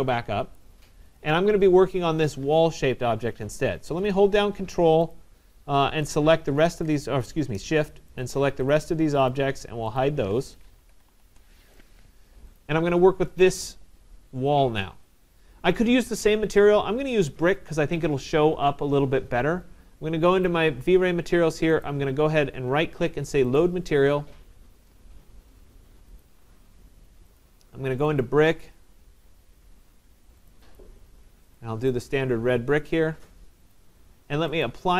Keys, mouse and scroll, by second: 0.6 right click, 1.2 click, 2.4 middle click, 4.8 middle click, 5.1 click, 6.1 ctrl+click, 8.3 shift+click, 8.8 shift+click, 9.4 shift+click, 10.0 alt+click, 11.1 typing, 16.3 typing, 20.4 click, 21.8 right click, 23.6 click, 26.2 click, 27.4 click, 28.0 click, 28.2 click, 30.5 click, 30.8 click, 31.6 click, 31.9 click, 33.8 click, 34.6 right click.